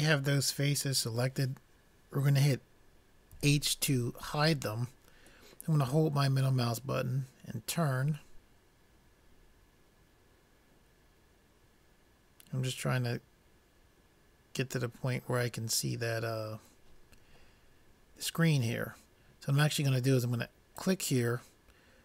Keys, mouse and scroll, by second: 3.4 h, 6.2 middle click, 21.4 click.